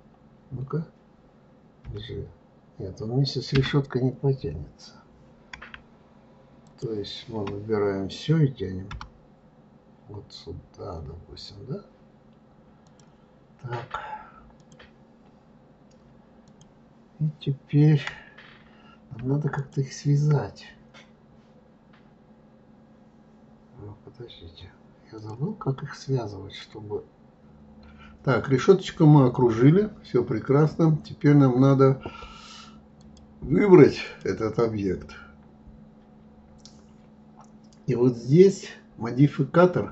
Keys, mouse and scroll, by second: 1.9 g, 6.6 shift+click, 8.9 g, 14.6 click, 16.5 click, 19.6 shift+click, 25.2 click, 25.7-27.4 middle drag, 33.0 click, 34.0 click.